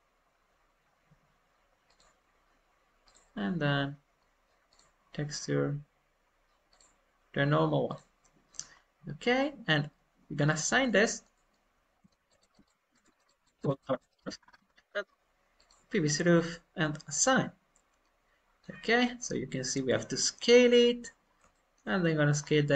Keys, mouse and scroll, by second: 3.0-8.6 drag, 8.6 scroll up 1, 9.0 scroll down 1, 9.3-11.8 middle drag, 11.8 scroll down 2, 12.0 shift+middle click, 12.2 shift+click, 13.0-14.1 shift+drag, 14.1 shift+middle click, 14.3-14.7 scroll up 10, 15.5-17.1 drag, 15.5 scroll up 2, 17.1-22.3 middle drag, 20.5 alt+scroll up 1, 22.3-22.7 scroll up 1.